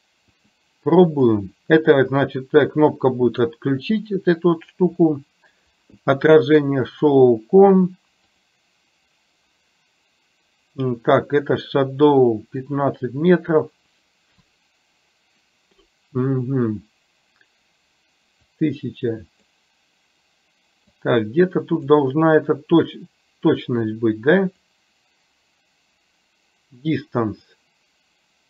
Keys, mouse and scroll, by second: 0.5 click, 1.2 click, 1.8 click, 3.5 click, 7.0 click, 12.7-14.6 drag, 18.7 click, 21.1 click, 24.0 click, 27.7-28.4 drag.